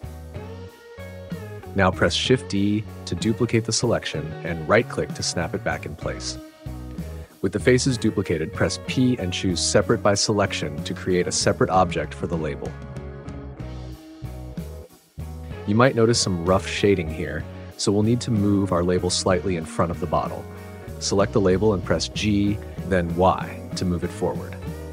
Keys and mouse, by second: 0.0 ctrl+click, 0.8-2.5 middle drag, 3.9 shift+d, 5.6 click, 9.1 p, 12.8 Tab, 13.5 click, 16.7 click, 17.7-18.9 drag, 21.2 g, 23.0 y.